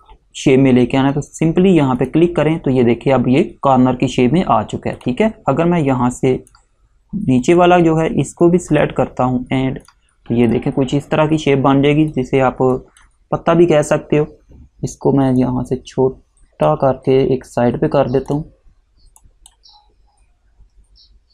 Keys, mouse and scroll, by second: 2.1 click, 5.1 click, 15.5 alt+click, 18.4 click.